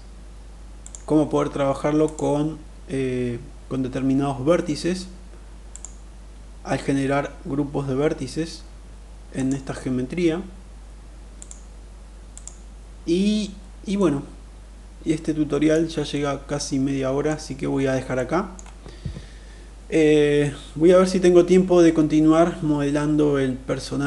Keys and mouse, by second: 0.2 click, 1.3 click, 5.2 click, 8.7 click, 10.8 click, 11.7 click, 13.4-15.2 middle drag, 15.5-16.7 middle drag, 17.6 middle click.